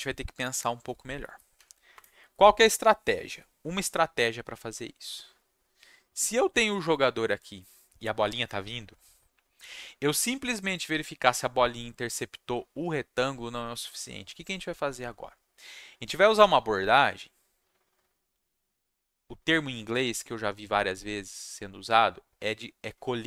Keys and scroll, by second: 1.5 Right, 1.9 Return.